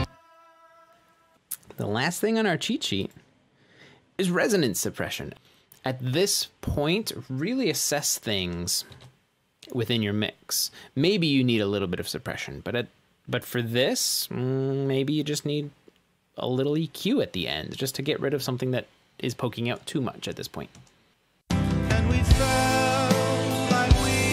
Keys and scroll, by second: 1.0 space, 10.0 shift+super+s, 21.4 space.